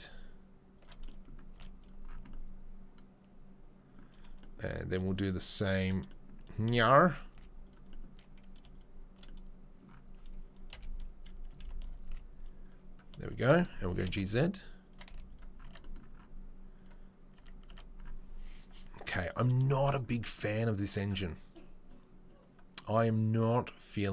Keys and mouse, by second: 1.5 z, 5.4 click, 5.5-8.7 middle drag, 8.7 shift+click, 9.1-24.1 middle drag, 10.7 KP_3, 11.2 KP_1, 11.4 KP_1, 12.0 z, 13.9 g, 15.1 z, 15.7 Tab, 17.3 Tab.